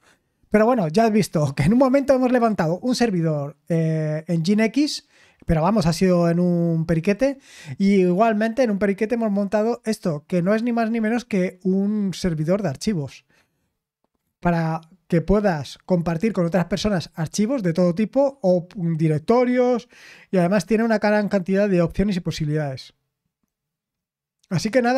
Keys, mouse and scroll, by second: 0.1 click, 0.5 click, 1.2 click, 10.4 click, 12.8 click, 14.5 click.